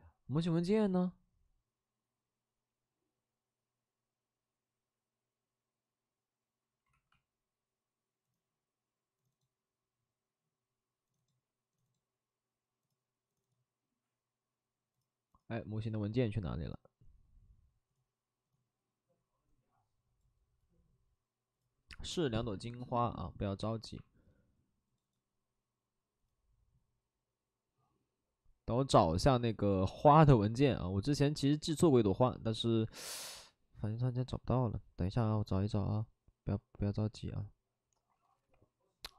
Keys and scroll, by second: 7.0 super+e.